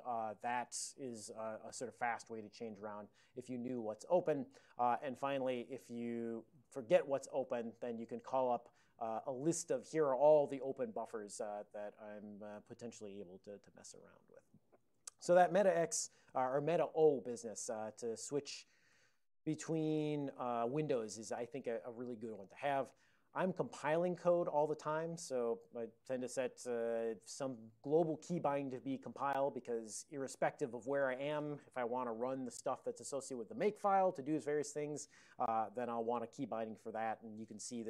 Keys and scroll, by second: 5.1 ctrl+x, 6.4 ctrl+x, 6.9 ctrl+b, 9.3 ctrl+n, 9.8 ctrl+n, 10.0 ctrl+n, 14.9 ctrl+x, 17.9 ctrl+x, 18.0-19.9 typing, 19.9 Return, 20.6 ctrl+n, 20.7 ctrl+n, 20.9 ctrl+n, 21.4 ctrl+p, 23.5 ctrl+n, 35.7 ctrl+c, 36.4 c.